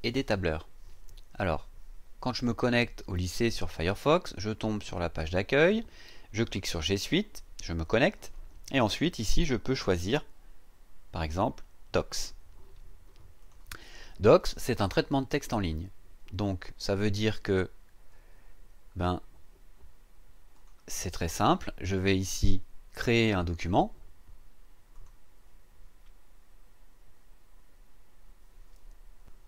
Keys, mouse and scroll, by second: 7.8 click, 13.4 click, 20.5 click, 24.9 click, 29.2 click.